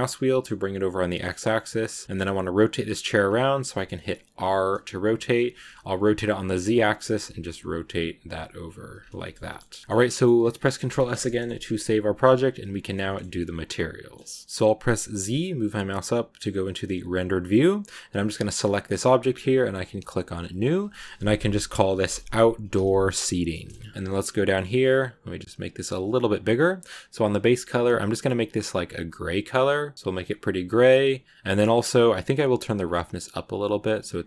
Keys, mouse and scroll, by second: 2.0 shift+middle click, 2.1 scroll up 1, 3.1 scroll up 1, 4.1 r, 8.8 scroll down 2, 9.1-10.7 shift+middle drag, 10.7 ctrl+s, 11.1 shift+scroll up 1, 11.5-15.1 middle drag, 15.1 z, 18.2 scroll down 1, 18.4 right click, 18.7 right click, 19.7-22.9 drag, 22.9 r, 23.6 BackSpace, 23.8 BackSpace, 23.9-25.7 scroll down 9, 25.7 click, 26.4-27.3 scroll down 1, 27.3 click, 31.4 middle click, 31.6 scroll up 2, 32.7-34.2 drag.